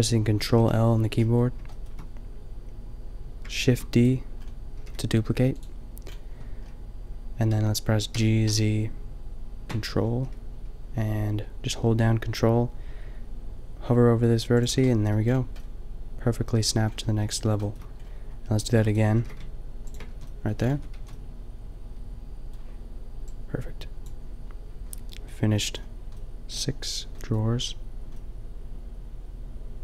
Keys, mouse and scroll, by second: 0.5 ctrl+l, 3.5 shift+d, 4.7 g, 8.1 g, 14.5 click, 14.8-16.3 middle drag, 16.3 click, 17.2 middle click, 18.7 shift+d, 18.9 click, 19.1 g, 20.0 a, 20.7 Tab, 21.0 a, 24.0 a.